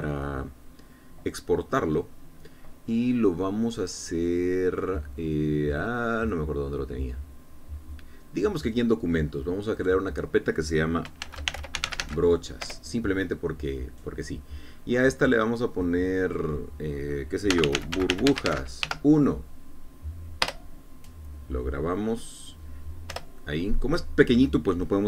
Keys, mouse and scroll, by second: 0.4 e, 10.7 click, 12.2-12.9 typing, 13.6 Return, 16.8 click, 18.5-19.8 typing, 21.4 Return, 24.1 Return.